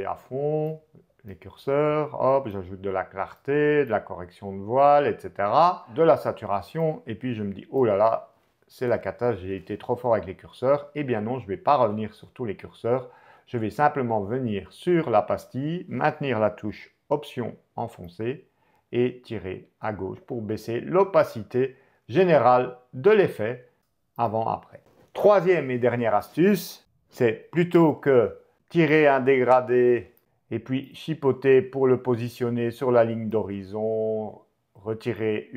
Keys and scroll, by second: 24.9 BackSpace, 27.7 m.